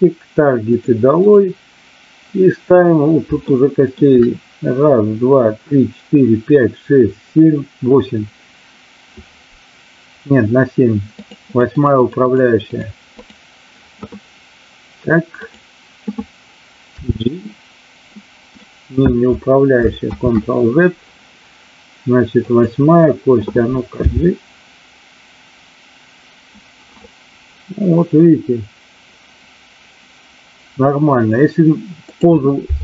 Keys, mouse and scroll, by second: 1.1 click, 3.5-3.9 shift+middle drag, 11.1 click, 11.6 click, 11.9 click, 12.2 click, 13.1 click, 16.8 g, 18.6 click, 20.1 ctrl+z, 22.5 click, 23.9 g, 31.9 click.